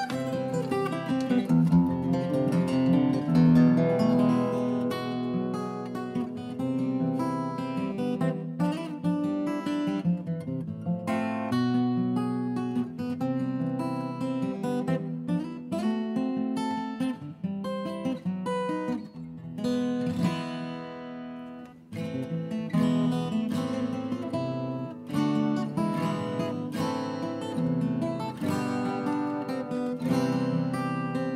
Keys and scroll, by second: 3.1 shift+Right, 3.2 shift+Right, 3.4 shift+Up, 3.5 shift+Right, 3.6 shift+Up, 3.8 shift+Down, 3.9 shift+Right, 5.4 Down, 5.7 Return, 7.2 Delete, 10.8 Down, 10.9 Return, 13.6 shift+Right, 13.6 Escape, 19.4 ctrl+d, 24.0-24.6 shift+Right, 24.9 shift+Left, 25.0 shift+Left.